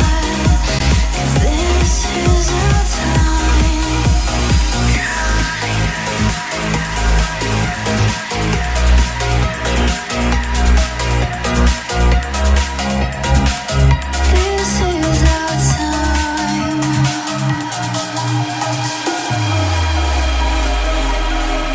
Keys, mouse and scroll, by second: 4.5-6.1 typing, 6.9-8.6 drag, 12.5 KP_6, 12.6 KP_0, 13.9 typing, 17.5-18.7 drag, 19.4-20.2 typing.